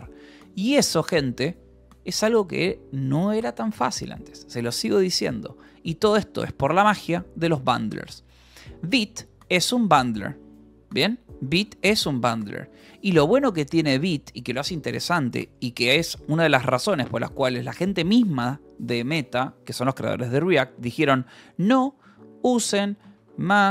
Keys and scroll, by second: 1.5 ctrl+h, 6.4 k, 7.1 j, 8.3-12.3 typing, 10.4 Return, 13.0 Escape, 16.0 j, 16.3 o, 16.5 Return, 17.6 BackSpace, 20.6-23.7 typing.